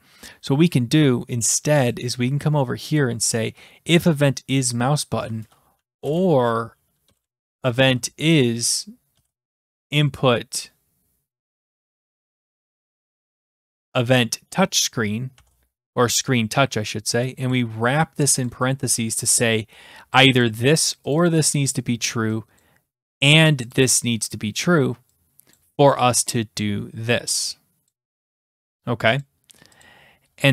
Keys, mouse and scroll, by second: 0.9 click, 1.9 click, 3.0 click, 3.9 click, 5.7-10.3 typing, 11.5-12.7 typing, 13.0 Return, 17.5 click, 18.5 click, 20.5 click, 20.6 click, 21.1 click, 21.3 click, 22.6 click, 23.2 click, 23.3 click, 23.8 click, 23.9 click, 25.6 click, 27.9 click, 29.2 click, 29.8 click.